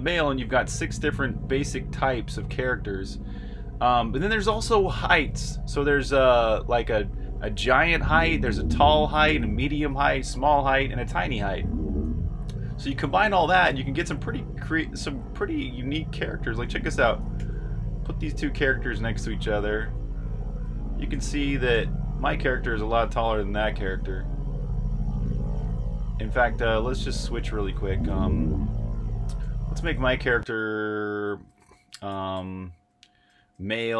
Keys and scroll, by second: 0.0-0.4 typing, 2.9 typing, 5.1-11.5 typing, 13.2-19.8 typing, 22.6-24.1 typing, 25.6-29.6 typing, 30.1 super+q, 31.8-33.9 typing.